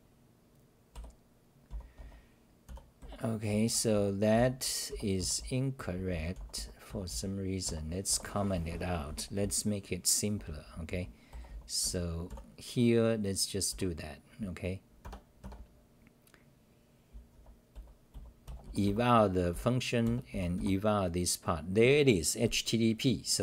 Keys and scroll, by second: 0.9-3.0 typing, 3.5 Return, 3.7 Return, 3.9 Return, 4.1-13.7 typing, 15.4 Tab, 17.1-19.5 typing, 18.8 Delete, 20.5 Delete.